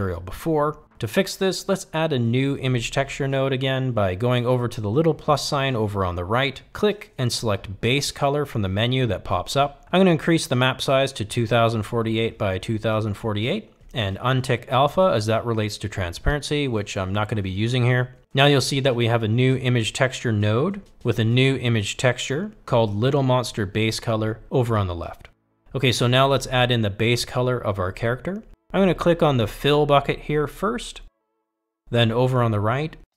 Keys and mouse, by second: 2.8-19.9 drag.